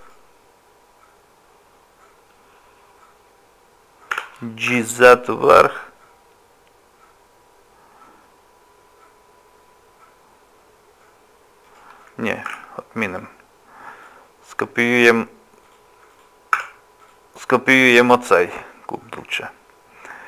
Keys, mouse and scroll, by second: 4.1 g, 12.5 ctrl+z, 13.1 click, 13.8 click, 15.6 click, 16.1 click, 16.6 Tab, 17.0 click, 17.8 scroll up 1, 18.4 scroll down 1, 18.7 shift+middle click.